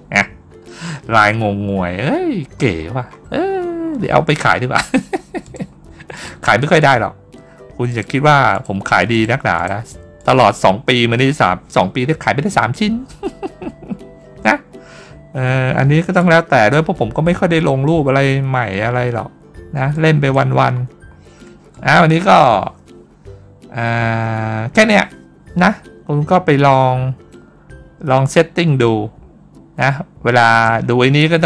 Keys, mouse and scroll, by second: 1.8 scroll up 1, 2.3 middle click, 2.6 middle click, 2.9 middle click, 3.7 middle click, 4.0 middle click, 4.1 middle click, 5.3 click, 6.0 click, 6.6 click, 7.7 click, 8.4 click, 9.0 click, 9.4 click, 10.0 click, 16.0 click, 17.1-17.6 scroll up 1, 17.6 scroll down 1, 18.8-19.5 ctrl+scroll down 2, 19.8 middle click, 20.4-21.2 ctrl+scroll down 1, 21.6-21.9 middle drag, 27.7 middle click, 28.7 scroll down 1, 30.4 click.